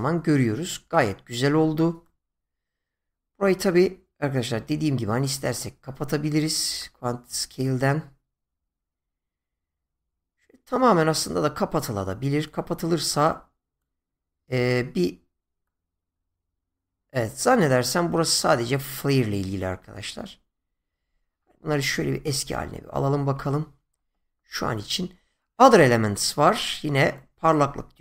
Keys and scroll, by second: 21.9 ctrl+z.